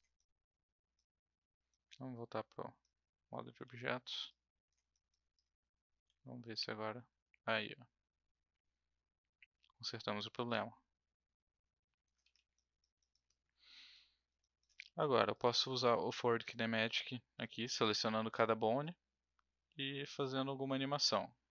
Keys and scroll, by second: 3.6 w, 6.0 e, 12.2 ctrl+z.